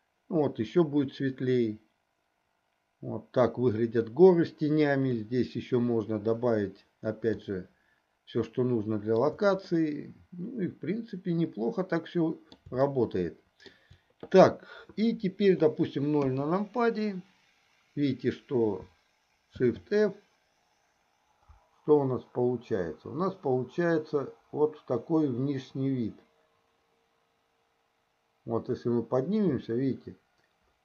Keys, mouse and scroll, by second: 7.7-9.6 shift+middle drag, 9.9-12.9 middle drag, 13.2-14.5 shift+middle drag, 16.7 KP_0, 19.8 shift+f, 27.0 middle click.